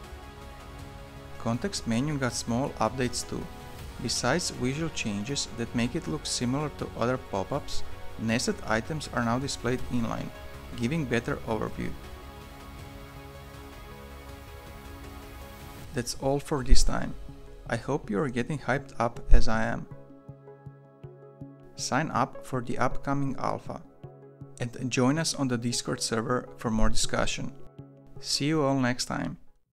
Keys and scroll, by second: 10.2-13.1 typing, 11.6 ctrl+BackSpace, 15.8 Escape.